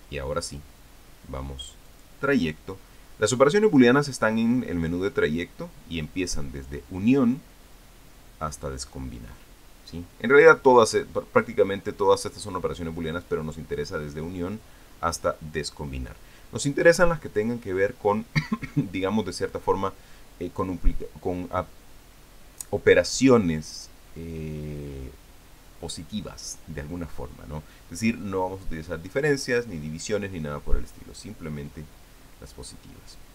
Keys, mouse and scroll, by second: 2.7 click.